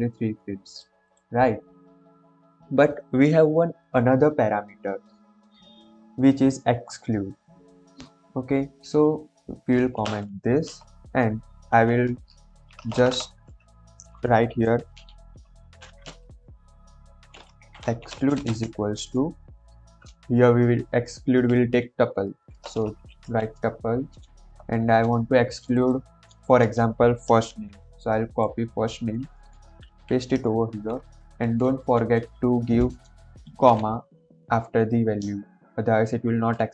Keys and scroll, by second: 9.7 ctrl+/, 10.7 Return, 12.0 Return, 12.5 BackSpace, 13.4 Return, 14.9-18.4 typing, 22.1 shift+9, 23.2 Left, 27.4 ctrl+c, 29.5 Right, 29.8 shift+', 30.6 ctrl+v, 31.3 Right.